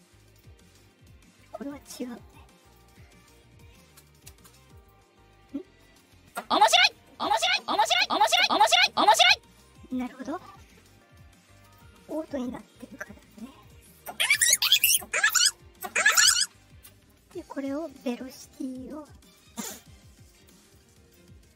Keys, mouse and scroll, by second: 1.6 click, 2.6 click, 3.8 space, 4.2 space, 4.7 click, 11.5 click, 13.1 click, 16.4 KP_Subtract, 17.8 click, 19.2 click, 20.2 click, 20.7 click.